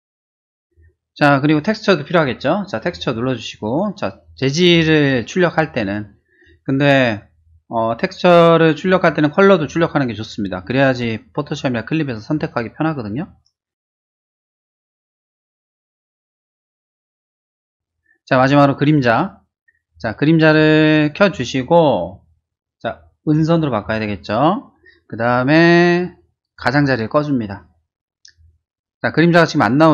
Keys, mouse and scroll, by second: 2.9 click, 14.9 click, 15.9 click, 16.5-17.1 typing, 17.2 Return, 21.1 click, 23.2 click, 25.6 middle click, 26.5 click.